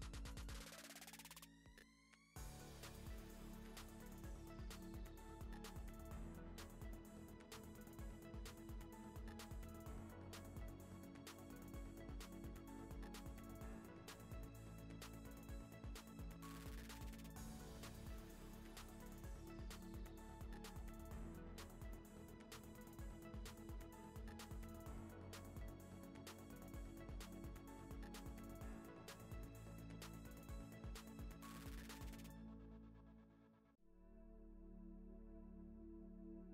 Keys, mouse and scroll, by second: 0.0 s, 0.6 click, 0.7 click, 0.8 shift+click, 0.9 ctrl+r, 1.2 click, 1.3 shift+click, 1.4 shift+click, 1.6 s, 2.3 ctrl+r, 2.8 2, 2.8 click, 2.9 shift+click, 3.1 ctrl+b, 3.7 ctrl+b, 4.6 ctrl+z, 5.3-8.7 typing, 5.4 click, 6.0 click, 6.4 click, 7.1 click, 7.2 shift+click, 9.7 click, 10.0 ctrl+click, 10.0 middle click, 10.3 g, 11.1 click, 11.2 middle click, 11.9 click, 12.0 g, 13.0 click, 13.2 middle click, 14.0 e, 14.7 Tab, 14.8-15.5 middle drag, 15.9 middle click, 16.0 Tab, 16.3 s, 17.3 click, 17.5 click, 17.6 g, 18.0 click, 18.1 g, 18.3 middle click, 18.4 click, 18.6 shift+click, 18.7 s, 19.2 middle click, 19.7 Tab, 19.8 right click, 20.0 middle click, 20.3-23.0 typing, 20.5 Tab, 20.7 scroll down 2, 21.8 ctrl+z, 22.3 Tab, 22.8 Tab, 24.2 ., 25.0 shift+d, 26.1-28.5 typing, 27.1 middle click, 28.0 middle click, 29.6 shift+d, 29.9 middle click, 30.1 z, 30.6 middle click, 31.6 click, 31.7 l, 31.9 g, 32.3 click, 32.4 l, 32.9 middle click, 33.3 Tab, 33.6-34.2 middle drag, 34.2 r, 35.5 g.